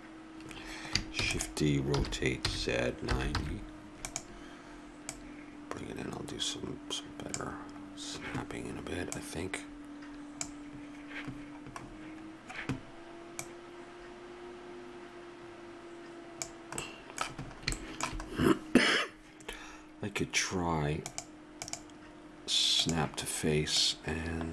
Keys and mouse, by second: 1.2 shift+d, 2.0 r, 5.0-7.0 drag, 9.1-11.1 drag, 11.3-13.4 middle drag, 13.4-15.3 drag, 16.8-17.9 middle drag, 17.9 click, 18.2 middle click, 21.1-23.7 drag, 23.8-24.5 drag.